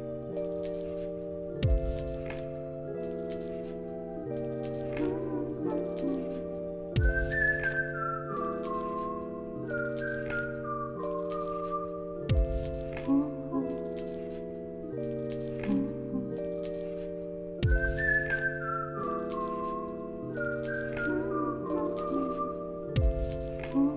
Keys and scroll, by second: 0.5 x, 3.3 ctrl+c, 4.1 ctrl+v, 5.4 0, 5.5 Return, 6.8 ctrl+s, 15.6 Delete, 19.4 ctrl+s, 21.7 alt+x, 22.9 1, 23.3 0, 23.8 Return.